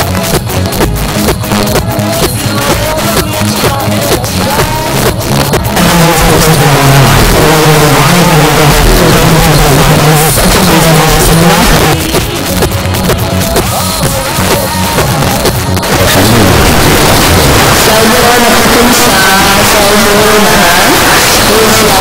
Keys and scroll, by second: 11.8 Page_Down.